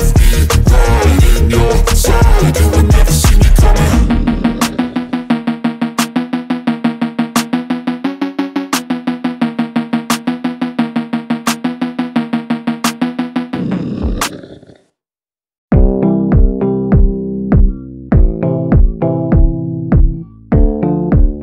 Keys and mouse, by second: 0.7 [, 1.0 click, 4.3 a, 5.3 click, 6.7 click, 7.0 click, 9.2 middle click, 10.5 click, 11.8 click, 12.6 ctrl+z, 12.8 click, 13.3 click, 14.2 middle click, 15.0 shift+click, 15.3 middle click, 18.2 click, 19.3 click, 19.5 click, 20.3 click, 20.8 ctrl+z.